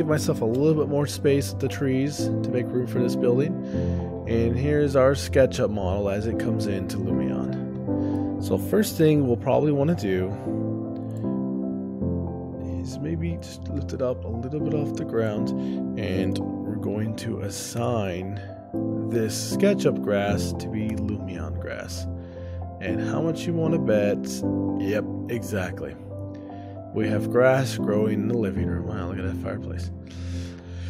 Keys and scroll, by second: 1.5 shift+space, 8.5 ctrl+alt+o, 11.8 shift+space, 12.5 ctrl+alt+o, 18.8 shift+space, 20.3 o, 21.9 shift+space.